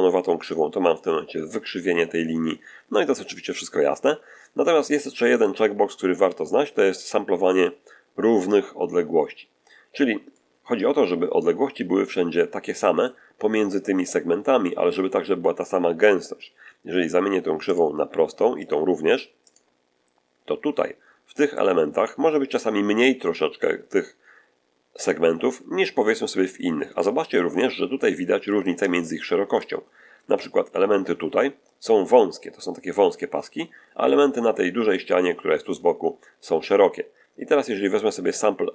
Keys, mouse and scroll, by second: 4.4 scroll down 1, 4.9 shift+middle click, 10.2-13.1 middle drag, 17.6 click, 18.5 click, 19.4 click, 20.6-21.2 scroll up 2, 26.4-26.7 scroll up 1, 26.8 shift+middle click, 28.2 middle click, 28.8 shift+middle click, 30.1 shift+scroll up 3.